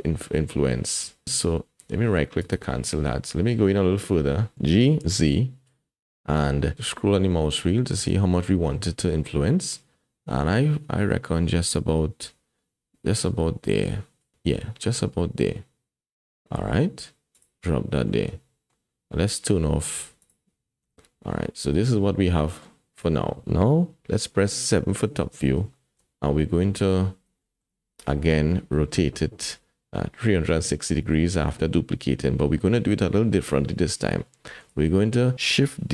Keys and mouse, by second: 4.3 middle click, 4.6 g, 18.3 click, 20.2 click, 20.8 Tab, 21.1 click, 22.0 middle click, 24.7 KP_7, 25.8 shift+click, 27.4 shift+middle click, 30.3 shift+middle click, 34.3 shift+middle click.